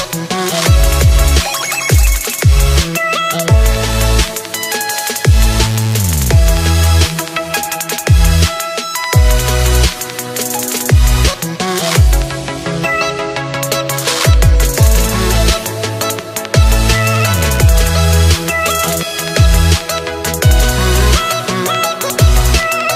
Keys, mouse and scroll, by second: 3.8-7.6 drag, 7.6 shift+d, 10.6 click, 11.3-12.2 scroll down 2, 12.2 click, 18.3 s.